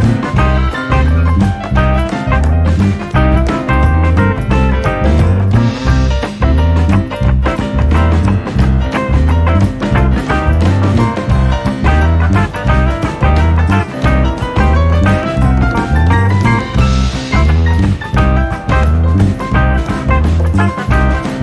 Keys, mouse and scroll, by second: 0.6-0.9 scroll down 1, 0.9-3.0 scroll up 1, 3.0-3.4 scroll up 1, 3.4 e, 7.9-8.3 scroll down 2, 8.3-10.7 scroll up 2, 10.7 click, 14.5 click, 17.5 ctrl+i, 19.5 click.